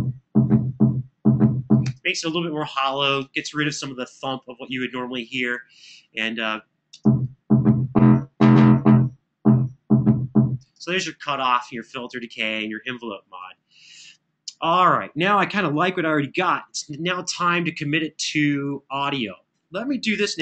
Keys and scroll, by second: 1.6 space, 6.7 space, 10.3 space, 20.1 super+=.